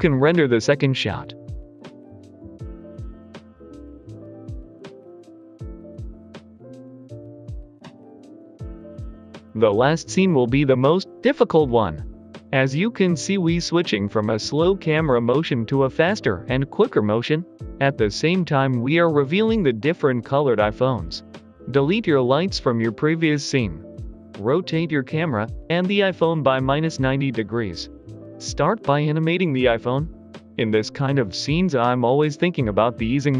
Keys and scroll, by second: 9.5 a, 10.2 a, 10.7 Delete, 14.0 a, 14.2 Delete, 15.6 Num_Lock, 15.8 Delete, 17.8 r, 17.9 x, 18.1 Page_Up, 18.2 Insert, 18.8 Escape, 19.5-26.3 typing, 19.6 Page_Up, 19.9 Escape, 20.0 Num_Lock, 25.9 Return, 27.4 r, 27.5 z, 28.0 Escape, 28.1 y, 28.4 g, 28.5 Return, 30.9 g, 31.0 z.